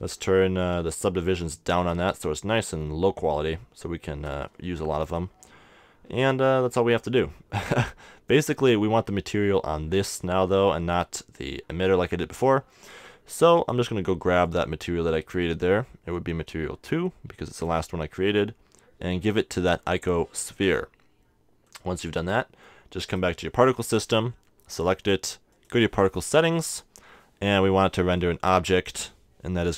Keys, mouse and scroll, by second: 1.9-3.7 drag, 4.6 Tab, 5.0 Tab, 13.5-16.4 drag, 22.5 click, 22.5-25.5 middle drag, 23.0-24.8 right drag, 25.5-27.3 drag, 28.7-29.7 drag.